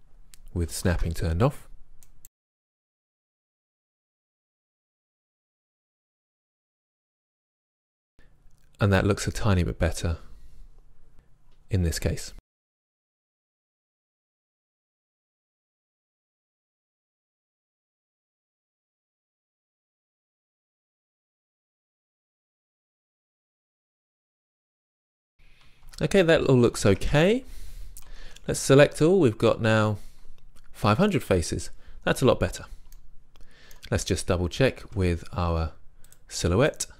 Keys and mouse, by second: 1.0 shift+Tab, 3.6 g, 3.7 right click, 3.7 click, 3.9 right drag, 4.1-5.1 middle drag, 5.4 click, 6.4 middle click, 6.7-7.4 drag, 7.4 click, 12.7 right click, 13.0 shift+Tab, 13.2 g, 13.6 click, 14.2 click, 14.7 click, 14.9 middle click, 15.4 g, 16.0 g, 16.2 click, 16.9 right click, 17.0 g, 17.4 g, 17.6 middle click, 18.6 right click, 18.9-22.8 typing, 19.2 click, 19.6 right click, 19.8 right click, 21.0 click, 21.2 click, 21.8 click, 22.2-22.6 drag, 23.0 click, 23.2 click, 23.8-24.2 drag, 23.9 g, 24.2 middle click, 24.8 middle click, 25.9 Tab, 26.9 Tab, 28.2 a, 28.3 a, 35.0 Tab.